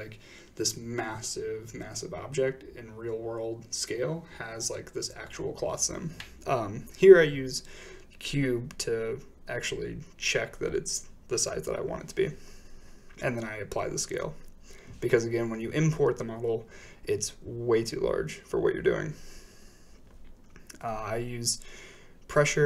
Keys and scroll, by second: 2.0-2.4 typing, 2.5 Return, 8.3 a, 8.3 x, 10.0 ctrl+a, 20.8 5, 21.0 Return.